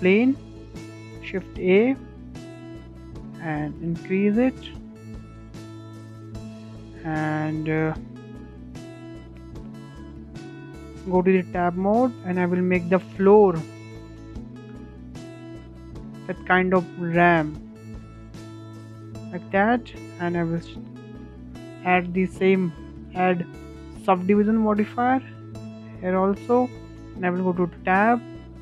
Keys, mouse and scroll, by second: 1.4-1.8 scroll down 4, 1.8-2.4 scroll up 1, 2.4 s, 4.2-4.7 middle drag, 4.7-5.0 scroll up 3, 5.0 shift+middle click, 5.3 scroll down 3, 5.5-7.0 middle drag, 7.0 Tab, 7.4-8.4 middle drag, 8.4 2, 8.9 click, 9.3-12.5 shift+middle drag, 12.5 e, 15.3-15.9 scroll down 4, 15.6 shift+middle drag, 15.9-16.7 middle drag, 16.7 Tab, 16.9-17.2 scroll up 3, 17.2-18.5 shift+middle drag, 18.5-18.8 scroll up 2, 18.8-19.2 shift+middle drag, 19.2-19.7 scroll down 2, 19.7-21.8 middle drag, 21.8 click, 22.5-24.8 drag, 24.8-26.8 shift+middle drag, 26.8 Tab.